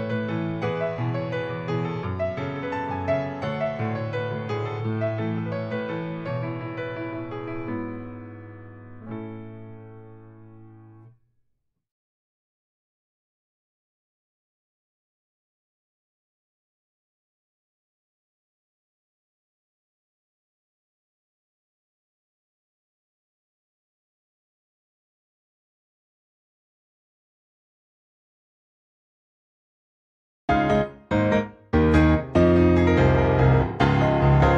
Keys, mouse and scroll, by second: 0.0 click, 0.8-1.3 scroll up 1, 1.4 shift+middle click, 3.3 click, 4.6 click, 9.4 click, 10.1 click, 12.9 ctrl+c, 13.0 ctrl+c, 14.0 click, 15.3 ctrl+v, 15.8 click, 24.8 ctrl+c, 25.5 click, 26.4 ctrl+v, 27.1 click, 28.0 click, 30.3 ctrl+v, 31.5 click, 32.6 ctrl+c, 33.5 click, 34.2 ctrl+v.